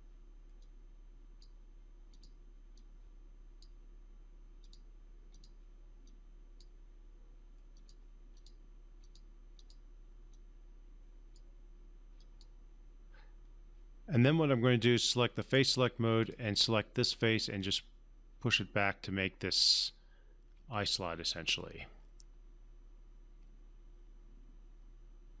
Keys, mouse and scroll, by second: 10.3-11.6 drag, 14.2-15.8 right drag, 16.2-18.8 drag, 20.7-25.4 alt+drag.